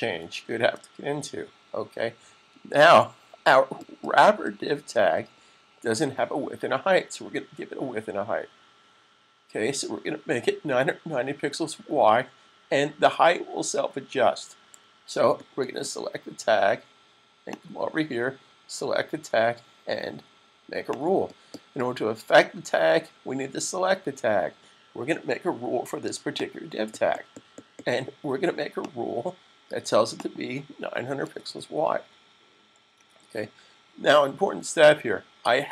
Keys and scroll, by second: 0.3 super+s, 30.7-31.9 typing, 34.6 s.